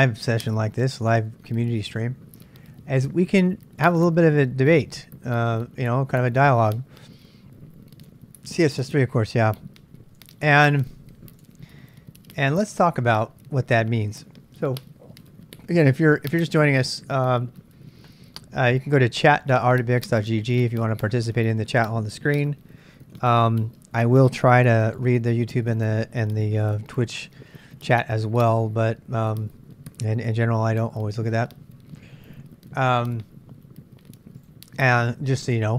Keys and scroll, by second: 3.4 BackSpace, 4.2 BackSpace, 4.5 c, 4.9 Return, 8.1 super+Tab, 10.2 super+Tab, 15.8-16.6 typing, 17.2 Return, 24.7 super+Tab, 26.2 super+Tab.